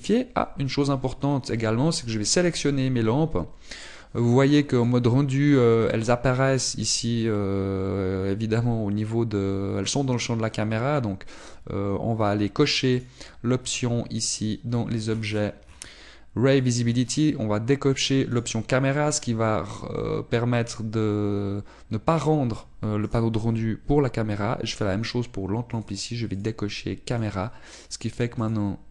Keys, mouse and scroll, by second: 1.1 click, 2.3 scroll down 1, 2.9 right click, 5.8 click, 12.3 click, 13.9 right click, 19.3 click, 19.3-20.8 scroll down 11, 20.8 click, 24.1 right click, 27.3 click, 28.3 click.